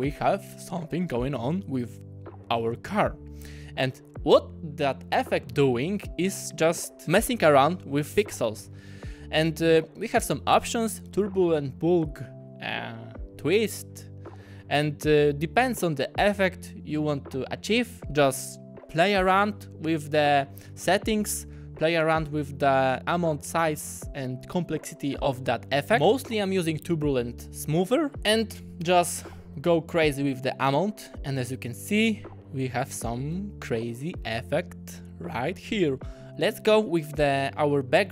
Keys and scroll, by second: 33.4 ,.